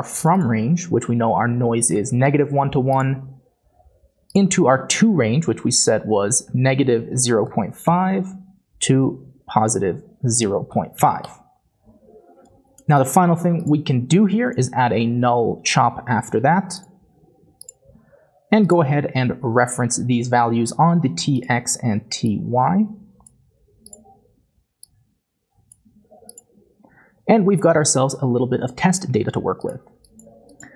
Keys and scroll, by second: 1.9 typing, 3.6-7.8 typing, 8.3 Tab, 10.4-11.0 typing, 11.2 Return, 14.6-17.3 typing.